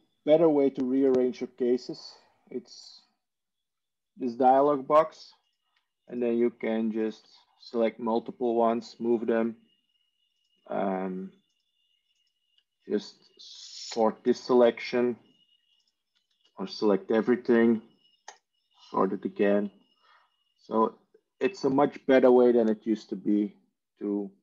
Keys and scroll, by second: 17.1 ctrl+a.